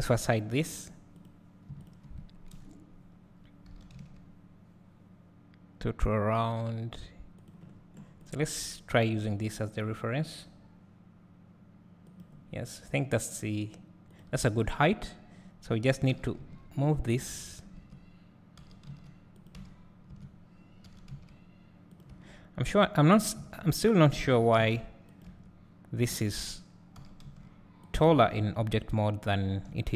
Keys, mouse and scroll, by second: 0.8 h, 1.3 click, 1.9 shift+click, 2.5 KP_1, 3.7 g, 7.7 scroll down 1, 8.3 click, 9.0 g, 12.3 Left, 16.1 g, 17.2 Tab, 18.6 g, 19.6 Tab, 20.9 g, 22.1 Tab, 23.5 Tab, 24.3 g, 25.3 Tab, 27.0 g, 27.9 click, 28.1 Tab, 29.7 `.